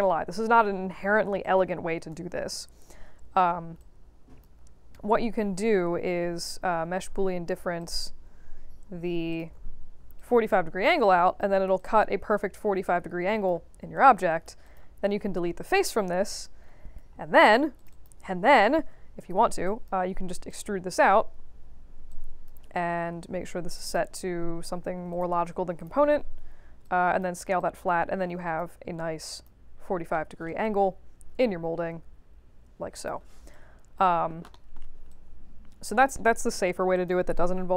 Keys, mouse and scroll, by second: 1.4 click, 3.3 scroll up 2, 3.7 alt+click, 5.1 middle click, 6.3 shift+click, 7.7 click, 9.3 click, 10.1-11.3 alt+drag, 11.7-13.4 alt+drag, 13.9 right click, 14.6 click, 16.4 right click, 17.7 click, 17.9 click, 18.8 ctrl+e, 19.1 middle click, 19.2 w, 19.6 alt+click, 20.4 click, 22.0 alt+click, 23.6 click, 25.1 click, 25.7 click, 26.8 click, 27.5-28.5 alt+drag, 29.3 click, 29.7 scroll up 2, 30.1 alt+middle click, 30.6-33.0 alt+drag, 33.5 right click, 34.5 alt+middle click, 35.0 alt+click, 36.9 click.